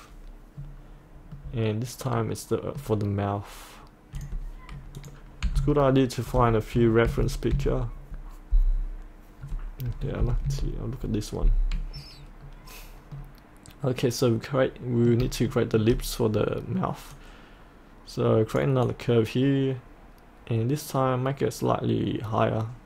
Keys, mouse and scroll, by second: 0.6-1.4 scroll down 1, 1.4 middle click, 4.2 click, 5.5 typing, 7.1 Right, 7.5 typing, 10.2 Left, 10.5 typing, 12.4-13.2 scroll up 1, 13.2-15.1 middle drag, 15.5 shift+middle click, 16.4-17.1 scroll up 1, 17.1-22.8 drag.